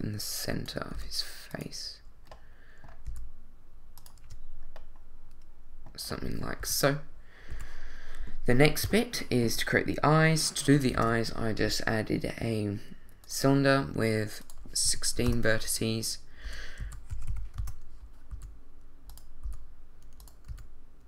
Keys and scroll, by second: 0.9 s, 3.1 e, 4.2 Tab, 6.6 |, 7.5 2, 8.8 i, 10.9 shift+a, 14.8 i, 15.2 6, 15.3 Return, 16.4 r, 16.8 x, 17.1 9, 17.3 0, 17.6 Return, 18.3 s, 19.4 g, 20.5 s.